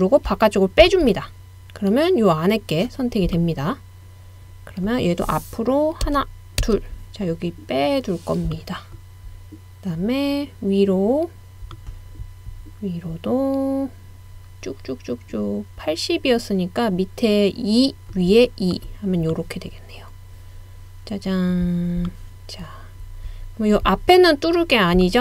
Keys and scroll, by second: 6.0 BackSpace, 6.6 Left.